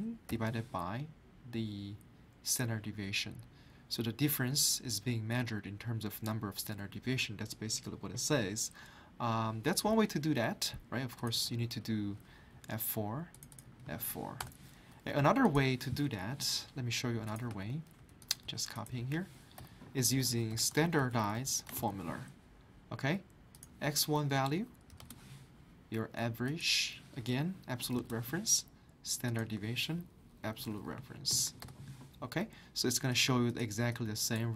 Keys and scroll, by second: 0.3 /, 12.5 F4, 13.6 F4, 14.4 Return, 17.9 ctrl+c, 18.4 ctrl+v, 19.3-21.8 typing, 24.9 typing, 27.3-28.6 typing, 30.2-31.8 typing.